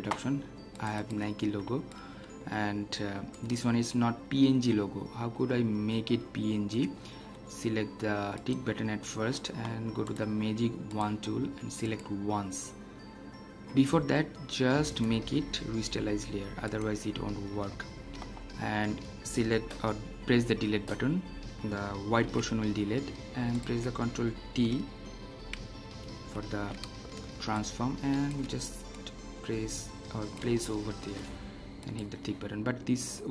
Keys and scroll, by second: 20.4 Delete, 22.2 ctrl+d, 26.2 ctrl+t.